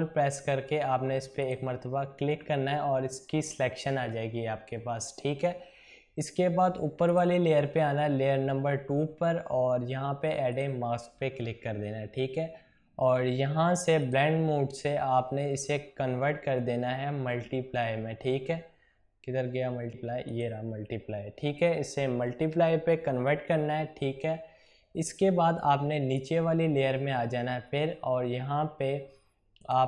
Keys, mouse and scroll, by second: 1.3 ctrl+click, 7.0 click, 10.4 click, 13.9 click, 20.3 click, 26.2 click, 29.6 click.